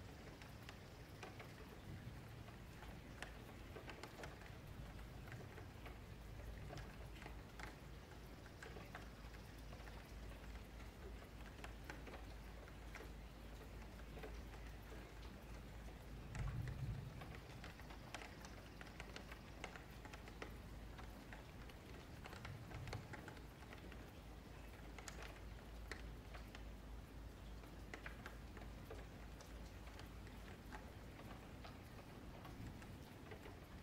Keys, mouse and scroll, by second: 0.8 ctrl+shift+b, 5.0 scroll down 4, 5.3 shift+middle click, 5.7-6.2 scroll up 5, 6.2 click, 7.0 ctrl+shift+b, 9.7-10.0 scroll up 1, 10.0 1, 10.4 click, 11.6 g, 12.5 shift+Tab, 12.8 g, 14.5 ctrl+z, 15.0 g, 16.3 scroll down 3, 16.5 middle click, 17.3 g, 19.7-20.8 middle drag, 20.8 g, 21.9 shift+middle click, 22.6 shift+scroll up 1, 22.7 shift+middle click, 23.1-25.1 scroll up 1, 25.1 middle click, 26.1 click, 26.3 g, 28.0-29.4 middle drag, 29.4 ctrl+z, 29.8 shift+middle click, 30.1 scroll up 1, 30.3 middle click, 31.1-31.8 scroll down 4, 31.2 shift+middle click, 31.8 middle click, 32.3 scroll down 1, 32.4 shift+middle click, 32.9-33.8 scroll down 2.